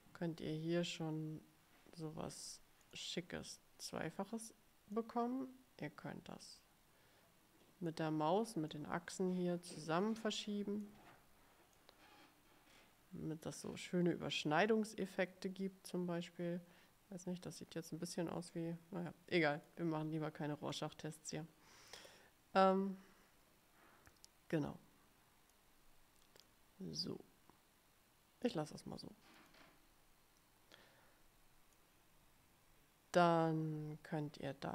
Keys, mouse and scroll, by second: 2.9 click, 5.1-8.2 drag, 8.8-11.2 drag, 11.9-20.0 drag, 20.8-25.9 drag, 26.6-28.8 drag, 29.5 click, 30.9-32.1 drag.